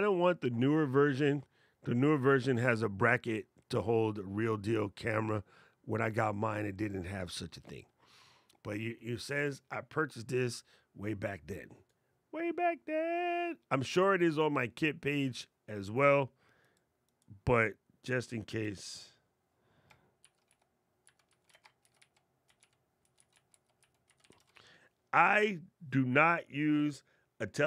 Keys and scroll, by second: 18.0 super+v, 20.0 shift+d, 21.6 shift+t.